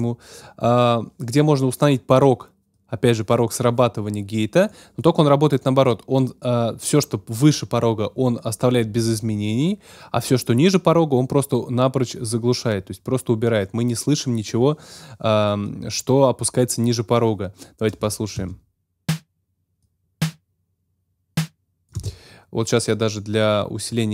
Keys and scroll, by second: 18.3 space.